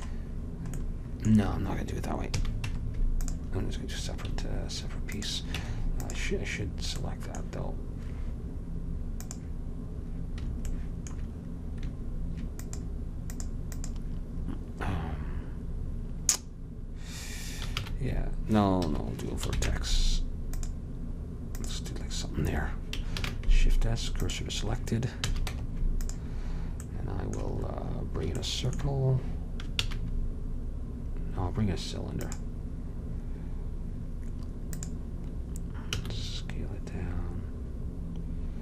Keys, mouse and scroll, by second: 2.4 a, 2.7 Tab, 5.6-6.7 drag, 5.6 Tab, 9.3-11.2 drag, 12.7-15.6 drag, 17.9 shift+s, 19.6 ctrl+Tab, 21.6-22.9 drag, 23.1 click, 23.3 shift+s, 25.3 a, 25.6 Tab, 29.9 shift+a, 36.0 s.